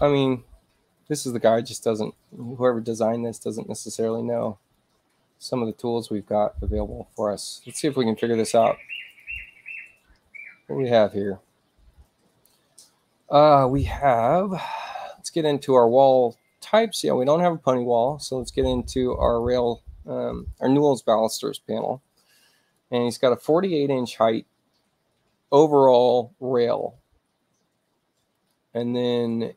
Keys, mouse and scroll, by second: 3.2 click, 4.6-5.6 drag, 8.3 click, 8.8 click, 9.1 click, 15.4 click, 17.9 click, 19.1 click, 20.3 click, 22.6 click, 28.2 click.